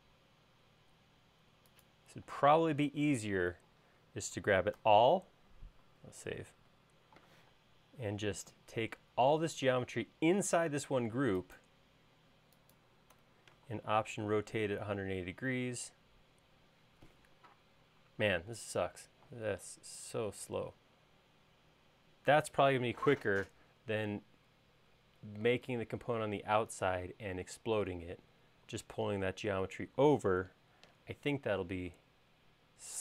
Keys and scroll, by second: 2.3 space, 4.8 super+a, 6.6 super+s.